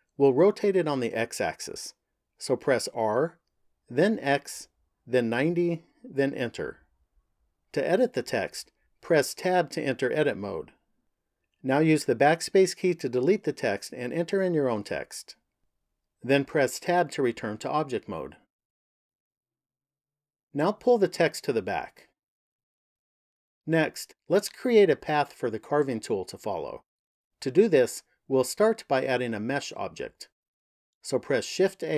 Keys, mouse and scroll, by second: 2.9 r, 9.4 Tab, 11.3 BackSpace, 11.6 BackSpace, 11.8 BackSpace, 12.1 BackSpace, 13.2-15.4 typing, 16.8 Tab, 21.7 click, 31.4 shift+a.